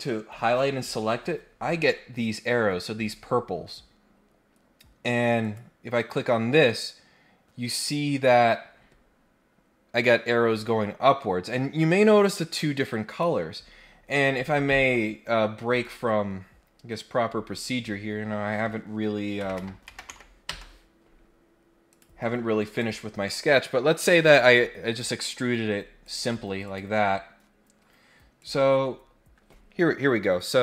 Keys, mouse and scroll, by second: 5.4 click, 13.0 click, 14.1 click, 15.7 click, 21.8 click, 22.7 click, 23.2 middle click, 26.0 click, 26.6 click, 28.4 click.